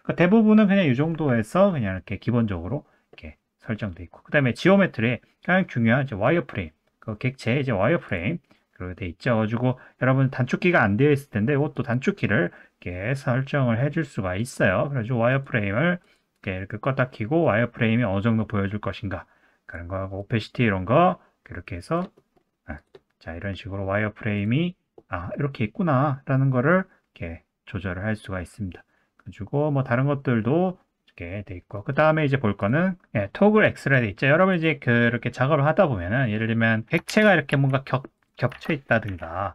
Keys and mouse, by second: 22.2 middle click, 22.8 click, 24.3-31.4 drag, 31.7 middle click, 34.5 click, 34.8 click, 35.5-36.4 middle drag, 37.1 shift+d, 37.5 s, 38.6 ctrl+z, 39.1 o.